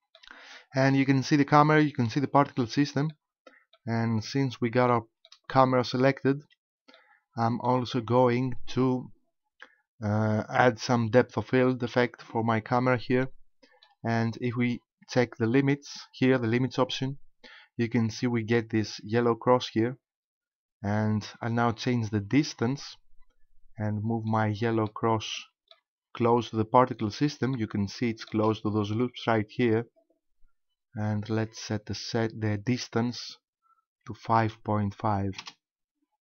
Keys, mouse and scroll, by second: 3.1 middle click, 4.1-4.7 scroll down 3, 4.9 shift+middle click, 6.4 KP_5, 7.0 middle click, 8.3 shift+middle click, 13.3 shift+middle click, 16.9 click, 21.6 click, 24.3 middle click, 25.4 shift+middle click, 25.9-26.3 scroll up 3, 27.0 middle click, 27.9 shift+middle click, 33.0 click, 36.1-36.2 scroll down 2.